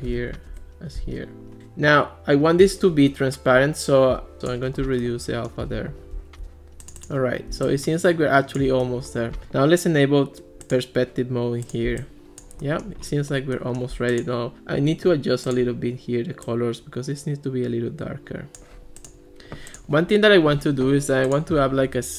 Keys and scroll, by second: 0.5 Return.